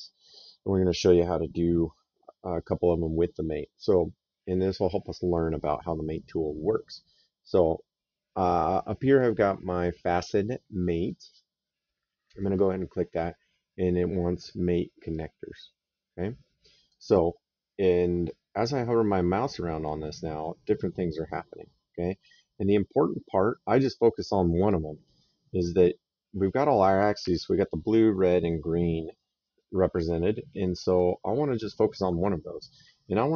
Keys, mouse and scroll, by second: 12.1 click.